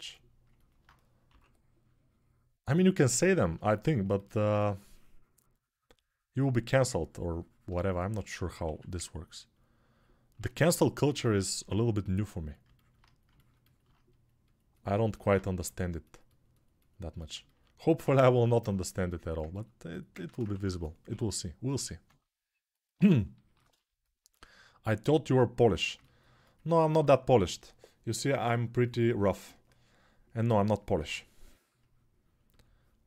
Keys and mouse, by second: 1.0 6, 8.5 1, 11.4 g, 15.4 6, 20.3 1, 20.8 [, 21.4 [, 21.5 [, 30.7 p.